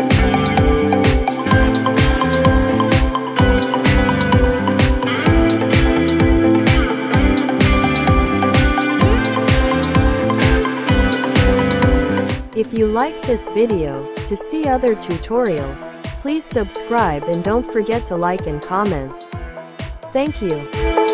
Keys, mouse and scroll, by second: 10.4 click, 11.5 click.